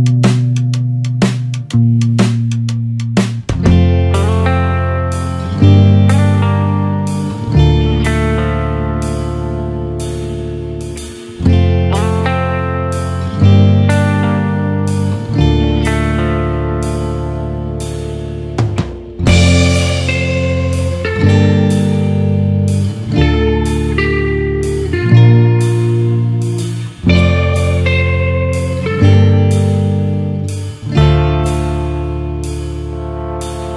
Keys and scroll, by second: 2.0 ctrl+z, 6.7 Return, 7.8 ctrl+=, 25.3 ctrl+z, 32.9 ctrl+z.